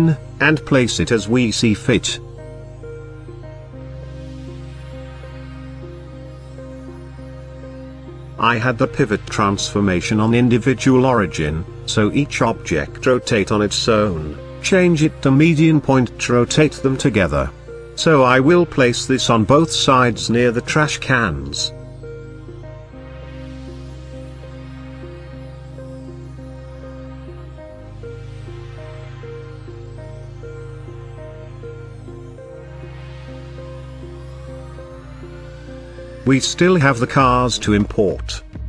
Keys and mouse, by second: 2.9 ctrl+v, 4.4 KP_Decimal, 5.1-5.5 middle drag, 5.9 shift+middle drag, 6.7 g, 7.1 shift+z, 8.0 click, 8.3 r, 8.5 z, 9.1 KP_9, 9.4 KP_0, 9.7 click, 10.3 ctrl+z, 13.2-15.2 drag, 15.9-18.3 typing, 17.2 click, 20.0 click, 20.9 middle click, 21.4 shift+middle click, 22.1-23.4 shift+middle drag, 25.5-25.9 shift+middle drag, 26.6 shift+d, 27.0 x, 29.1 click, 31.0-31.3 middle drag, 31.7-32.1 shift+drag.